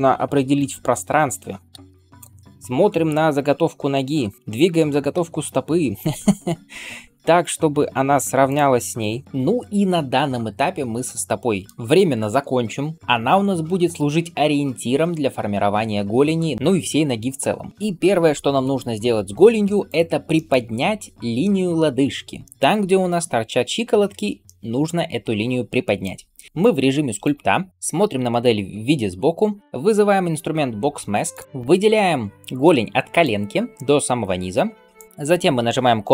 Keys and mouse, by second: 1.6 KP_1, 4.7 g, 9.2-31.4 right drag, 10.0-11.5 middle drag, 19.7 click, 19.7 middle click, 22.2-31.4 shift+middle drag, 26.6-31.4 drag, 27.7 KP_3.